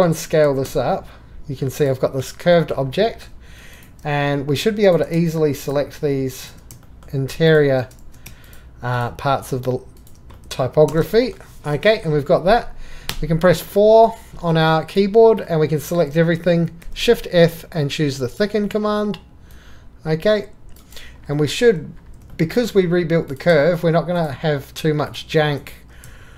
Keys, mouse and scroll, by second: 1.0 s, 1.8 click, 3.1 middle click, 3.5 3, 3.8-4.8 drag, 4.9-5.6 shift+drag, 6.8-7.4 shift+drag, 8.0 ctrl+z, 14.0-15.4 drag, 16.8 shift+f, 19.4 click, 19.5 click, 21.6 click, 22.3-22.6 shift+drag, 23.3-24.1 drag, 25.4 shift+click.